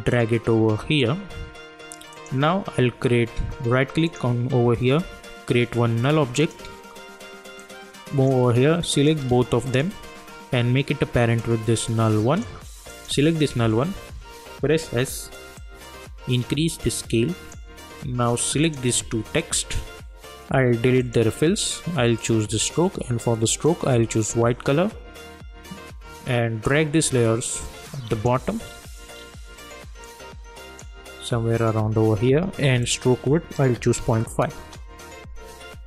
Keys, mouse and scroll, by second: 4.0 right click, 6.5-12.9 drag, 14.7 s, 15.6-18.6 drag, 19.4 shift+click, 27.4 click, 28.6 scroll down 1, 30.0-34.5 drag, 34.5 Return.